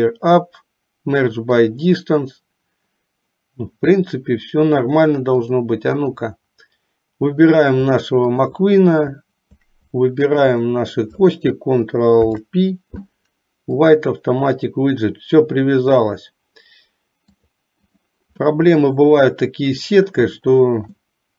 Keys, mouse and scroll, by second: 5.5 click, 8.5 shift+click, 12.2 ctrl+p, 17.6 click, 18.5 middle click, 20.0 click, 21.2 middle click.